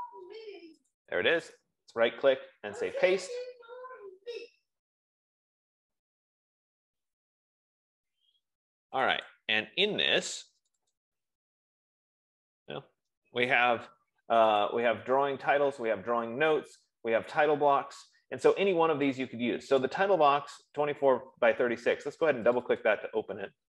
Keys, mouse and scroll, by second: 1.3 click, 2.1 right click, 3.6 click, 9.3 click, 9.9 click, 11.1 click, 11.4 click, 15.2 click, 20.2 click, 23.0 click, 23.2 click.